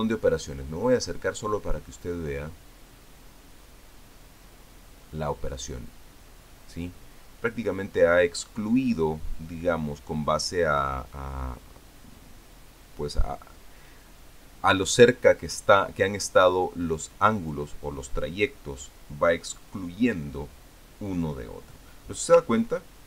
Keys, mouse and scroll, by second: 1.1 ctrl+scroll up 2, 1.6-2.7 ctrl+scroll up 3, 3.2 ctrl+scroll up 2, 4.4 ctrl+scroll up 2, 5.5 ctrl+scroll down 1, 6.9 ctrl+scroll down 1, 12.5-13.1 ctrl+scroll down 1, 13.4 ctrl+scroll down 1, 14.0 ctrl+scroll up 1, 15.1 ctrl+scroll down 1.